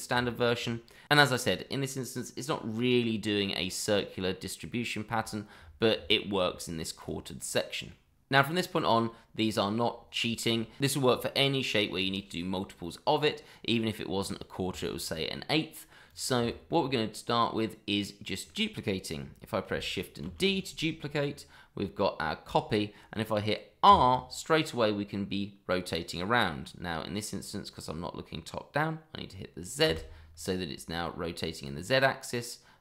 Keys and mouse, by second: 0.2 shift+middle drag, 1.7-2.1 middle drag, 8.9 shift+middle drag, 12.7-13.5 middle drag, 14.2-14.5 middle drag, 14.7 shift+middle drag, 15.3-15.9 middle drag, 16.1 click, 16.5 shift+middle drag, 16.9-18.5 middle drag, 20.2 shift+d, 23.8 r, 29.8 z.